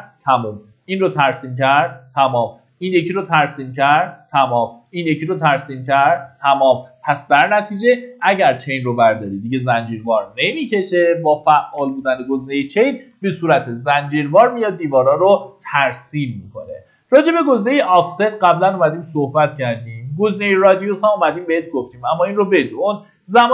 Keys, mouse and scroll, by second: 7.3 Escape, 10.3-11.8 drag, 12.0 Delete, 12.7-13.8 middle drag, 13.8 typing, 15.7-23.5 drag.